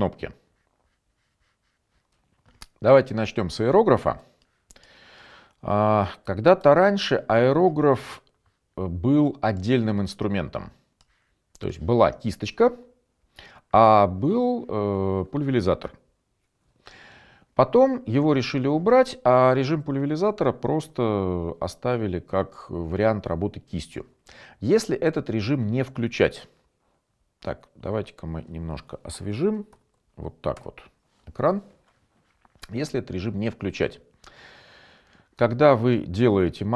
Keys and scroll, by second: 4.8-7.7 typing, 30.0 shift+F5, 30.8 Return.